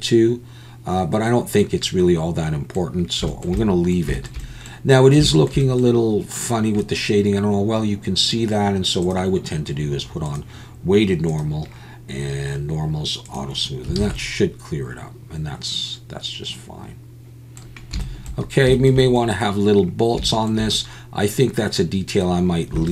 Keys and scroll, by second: 14.0 alt+a.